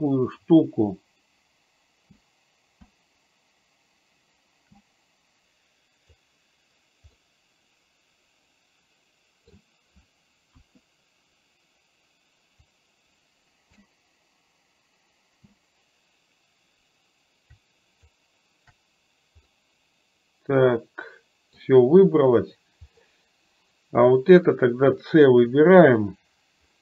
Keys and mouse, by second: 7.2-9.6 middle drag, 10.6 KP_1, 12.6-18.1 drag, 19.5-21.6 middle drag, 23.0-24.4 middle drag.